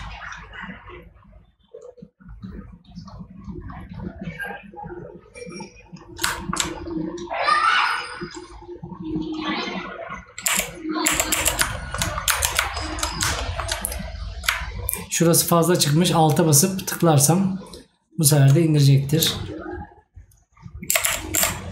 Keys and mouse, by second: 6.4 right click, 11.8 right click, 13.4 right click.